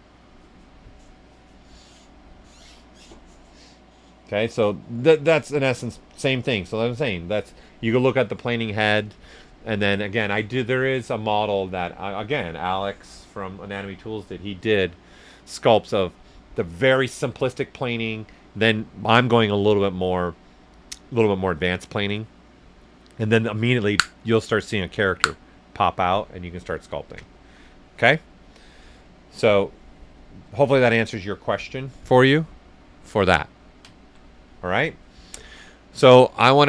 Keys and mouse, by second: 5.2 right click, 30.1 right click, 30.6 right click, 32.7 alt+right click.